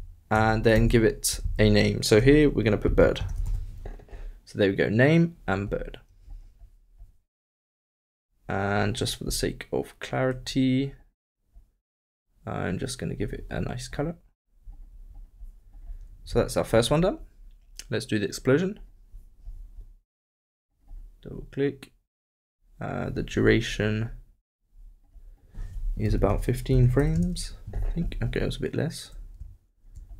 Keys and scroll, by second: 1.4 shift+Left.